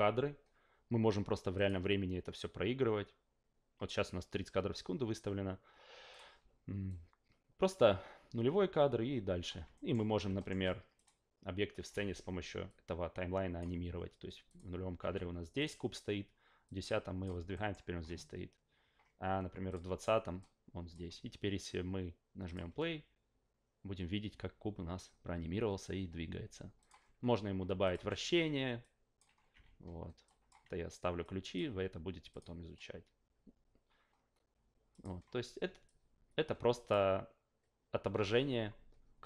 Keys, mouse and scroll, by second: 1.5 click, 6.1 click, 6.9-9.4 drag, 9.7 alt+middle drag, 10.4 alt+middle click, 10.9 click, 12.7-13.6 drag, 14.5 click, 15.6 click, 16.6 click, 17.5 alt+middle drag, 19.7 click, 20.4-20.9 drag, 22.4 click, 26.8 click, 27.8 click, 28.0 e, 28.8-29.2 drag, 29.5 s, 30.2 click, 31.2-31.5 drag, 32.3 click, 34.9 click, 35.8-36.9 drag.